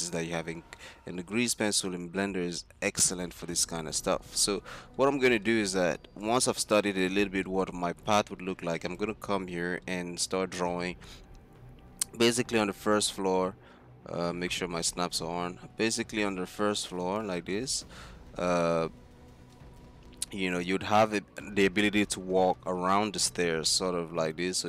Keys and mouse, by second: 3.1 middle click, 3.3 middle click, 5.0 click, 7.1-7.5 drag, 8.0 z, 8.4 z, 9.5 z, 10.3 z, 12.7-13.5 drag, 16.0 click, 19.6-21.4 middle drag, 23.6-24.6 d.